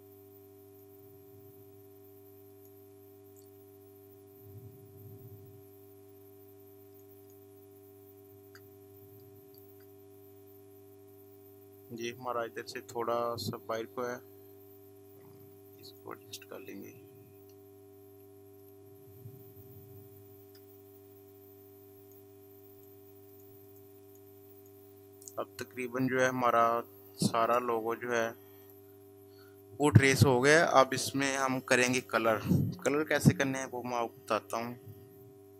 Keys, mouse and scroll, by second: 6.2 ctrl+space, 7.0 ctrl+space, 8.3 space, 9.0 click, 9.4 space, 11.9 click, 14.7-18.4 drag, 18.5 click, 20.9 ctrl+space, 22.8 ctrl+alt+click.